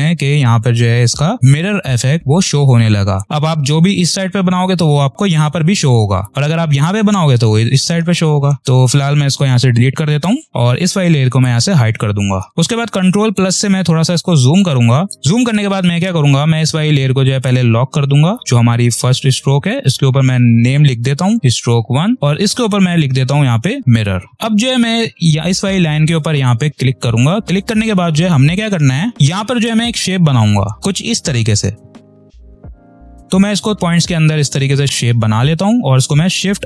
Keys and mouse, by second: 11.2 click, 13.2 ctrl+=, 14.5 click, 14.9 space, 17.3 click, 19.6 click, 20.9 s, 21.9 click, 23.8 m, 24.3 click, 26.3 click, 28.2 ctrl+-, 30.8 click, 32.1 click.